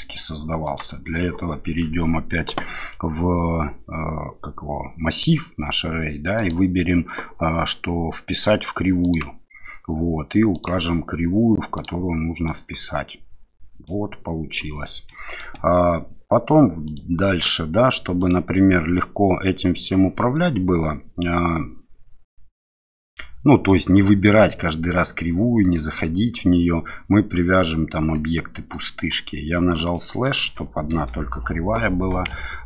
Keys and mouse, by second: 0.6 click, 12.4-13.8 middle drag, 15.0-15.4 middle drag, 15.8 KP_7, 16.8 click, 18.2 click, 23.6-24.2 middle drag, 29.9 middle click, 30.9 KP_7, 32.3 Tab.